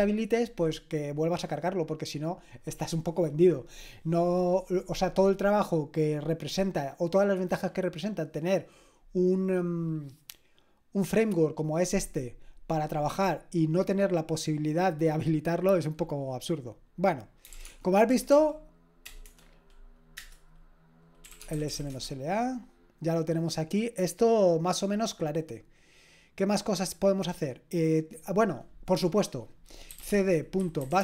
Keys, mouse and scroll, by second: 17.2-22.2 typing, 29.7-31.0 typing.